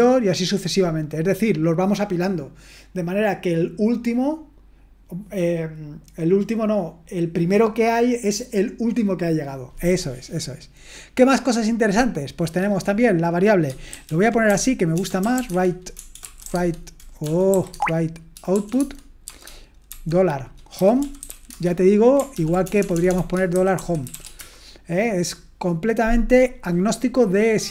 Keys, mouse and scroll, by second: 13.9-17.5 typing, 18.5-24.1 typing, 22.3 ctrl+p.